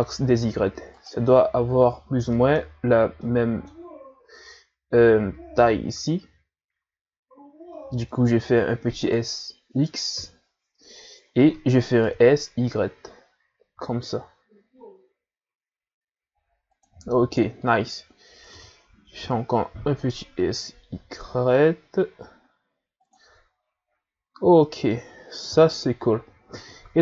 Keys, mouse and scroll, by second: 1.6-2.2 scroll up 1, 2.3-6.2 middle drag, 7.7 s, 10.1 KP_3, 11.3 s, 18.4 s, 24.6 middle click, 25.5 KP_1, 26.7-27.0 shift+scroll up 1.